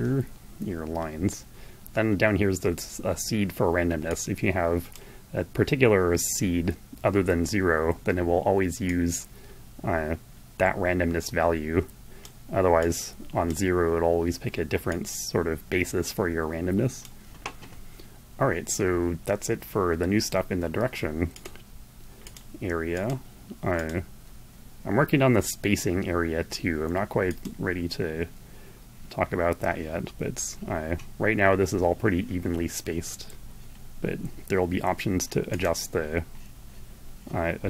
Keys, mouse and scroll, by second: 3.3-4.5 drag, 8.2-13.0 drag, 14.2-16.6 drag, 20.6 click, 21.5 click, 22.3 click, 23.1 click, 26.5 click, 34.8 click.